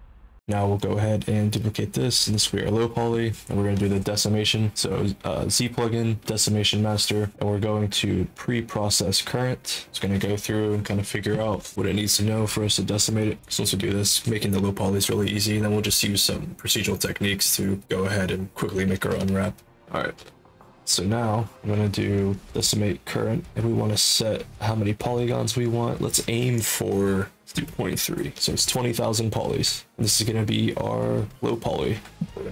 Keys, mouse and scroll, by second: 16.9 click.